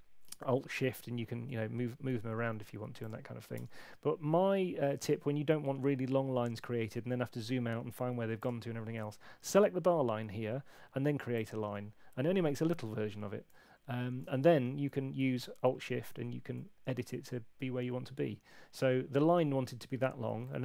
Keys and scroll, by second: 0.8 alt+shift+Left, 0.9 alt+shift+Left, 1.1 alt+shift+Left, 3.5 BackSpace, 14.3 alt+shift+Right, 14.4 alt+shift+Right, 14.8 alt+shift+Right, 15.1 alt+shift+Right, 15.8 alt+shift+Right, 16.0 alt+shift+Right, 20.4 super+8.